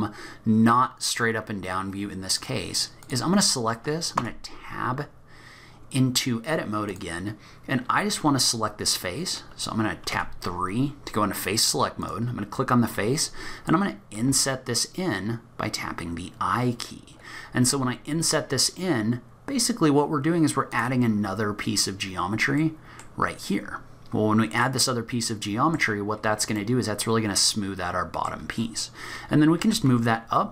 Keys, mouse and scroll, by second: 0.0 middle click, 0.0-0.3 scroll down 5, 0.2 scroll up 1, 2.4 click, 4.2 Tab, 6.9 click, 21.2-21.9 scroll up 5, 21.9-22.6 scroll down 2, 22.6 middle click, 22.6-23.2 scroll down 2, 23.2-24.4 scroll up 2, 24.6 middle click, 26.6 middle click, 29.6 g.